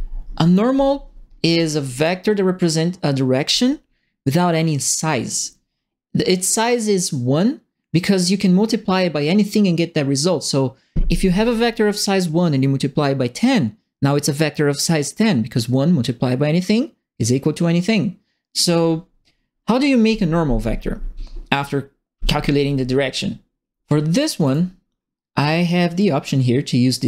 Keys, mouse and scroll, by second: 1.9 click, 24.4 click.